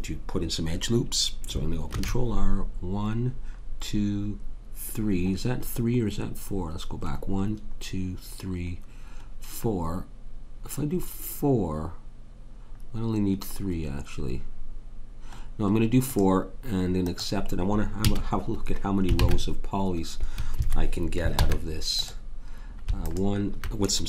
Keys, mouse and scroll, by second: 2.0 ctrl+r, 18.0 a, 19.3 Tab, 21.4 ctrl+Tab, 23.0 click.